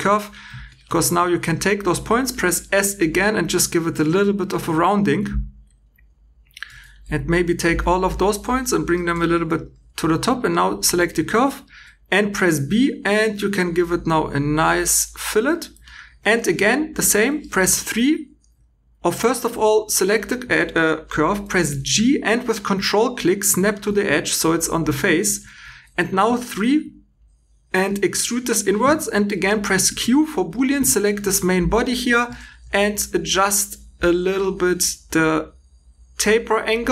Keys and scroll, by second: 1.4 s, 4.1 2, 5.6 2, 6.6 1, 7.6 g, 9.6 2, 11.0 v, 11.6 b, 17.4 3, 19.3 Escape, 19.8 2, 21.6 g, 25.7 3, 29.8 q.